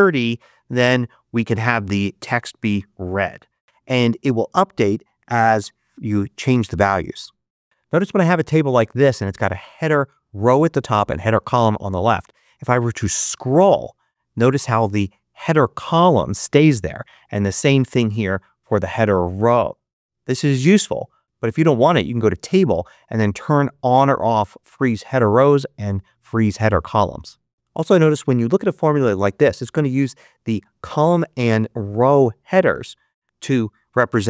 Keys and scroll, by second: 0.0-0.3 typing, 5.2 3, 5.5 5, 5.9 Return.